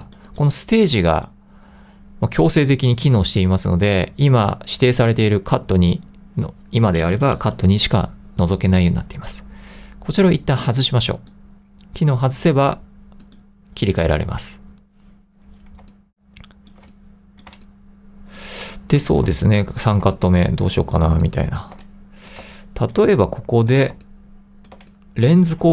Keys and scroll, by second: 16.0 3, 17.5-20.2 typing, 21.9 2, 22.5 1, 23.1 2, 24.9 1.